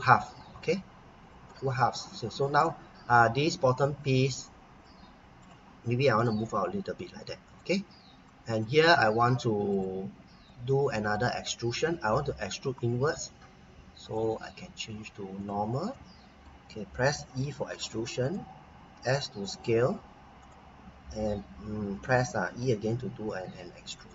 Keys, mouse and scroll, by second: 1.5 click, 2.6 middle click, 6.2 click, 8.1-8.6 scroll down 1, 8.6 middle click, 9.7 click, 10.4 middle click, 11.7-13.8 scroll up 1, 14.0 click, 15.9 middle click, 17.4 e, 18.2 click, 18.9 s, 20.4 click, 22.5 e, 24.0 click.